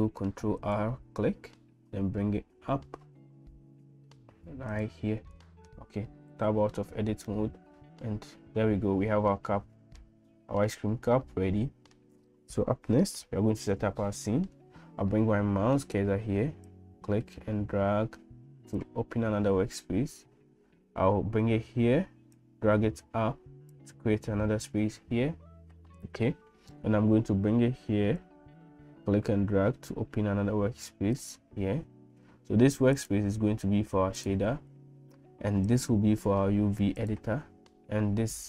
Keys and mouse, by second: 6.3 Tab, 7.3-10.2 middle drag, 10.7-12.0 middle drag, 16.7-18.8 middle drag, 22.4-23.8 drag, 28.3-31.3 drag, 33.0-34.3 drag, 35.7-37.2 drag.